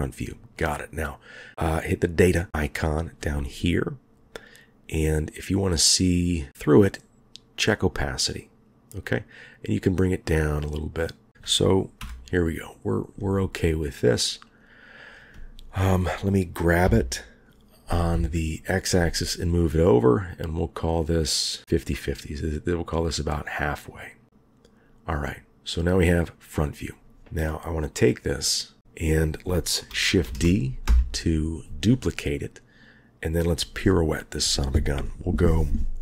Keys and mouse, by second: 12.0 KP_1, 14.5 click, 16.8 g, 29.0 click, 30.2 shift+d, 33.3 click.